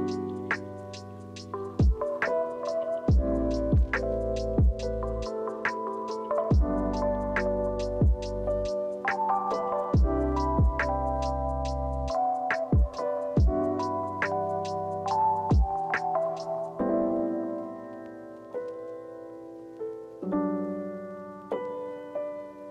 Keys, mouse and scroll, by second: 1.1 ctrl+c, 1.3 ctrl+f, 20.6 ctrl+c, 21.1 ctrl+f.